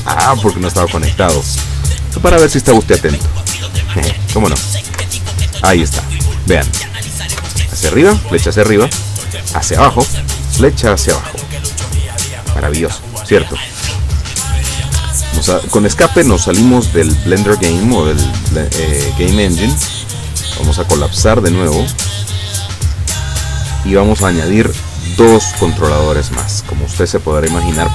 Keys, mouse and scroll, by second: 4.1 p, 5.1 Down, 7.4 Up, 9.9 Down, 14.9 Escape, 18.3-19.3 drag, 20.0 click, 20.8 click, 22.1 click.